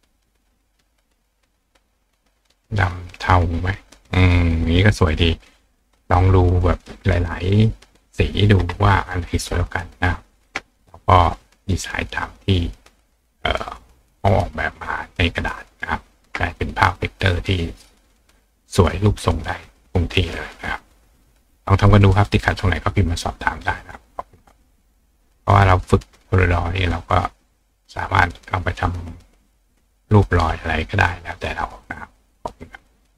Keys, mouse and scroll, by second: 3.1 click, 4.1 click, 5.0 click, 11.1-12.1 drag, 27.0 click.